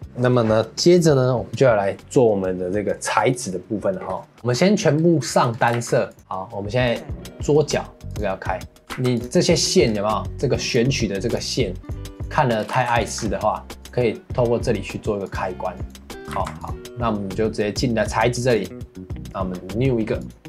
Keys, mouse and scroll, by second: 0.0 ctrl+s, 4.4 shift+middle click, 5.0 scroll down 2, 5.3 shift+middle click, 5.5 scroll up 1, 5.7 ctrl+s, 6.9 click, 8.1 click, 8.8 scroll down 3, 8.9 ctrl+s, 9.9 scroll up 2, 10.7 click, 11.3 click, 11.8 click, 12.1 click, 12.6 scroll down 3, 12.7 ctrl+s, 13.2 scroll up 3, 13.8 click, 15.2 click, 15.7 click, 16.3 ctrl+s, 16.9-18.5 scroll up 1, 18.5 click, 20.2 click.